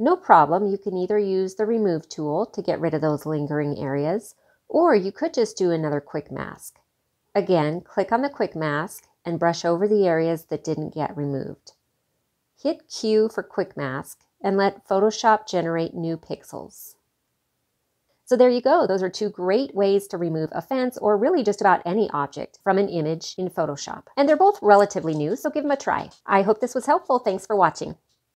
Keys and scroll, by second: 11.5 q.